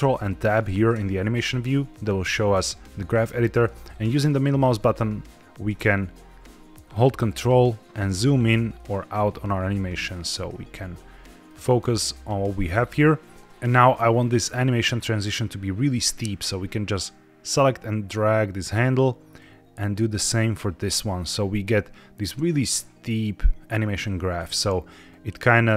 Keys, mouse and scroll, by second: 0.9 ctrl+Tab, 3.0 middle click, 4.1 middle click, 5.1 middle click, 7.1 ctrl+middle click, 8.2 ctrl+middle click, 8.7-10.1 ctrl+middle drag, 10.2-11.4 middle drag, 12.8-13.2 scroll up 3, 13.3 ctrl+z, 14.7 click, 19.3-21.1 drag, 23.9-24.3 drag, 25.0-25.7 drag.